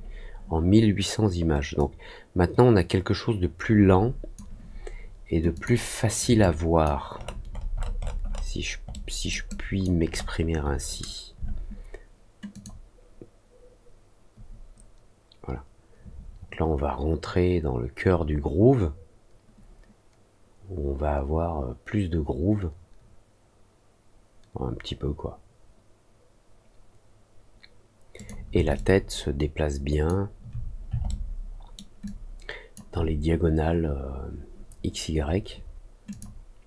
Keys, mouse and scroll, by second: 1.7-4.3 drag, 5.5 click, 6.3 alt+click, 7.1 alt+middle click, 7.4 alt+middle click, 7.7-8.4 alt+scroll up 3, 8.8 alt+middle click, 9.4 alt+click, 10.0 alt+scroll up 1, 12.5 click, 28.1 click, 28.7-30.0 alt+drag, 31.0 alt+middle click, 32.0 alt+click, 36.0 click.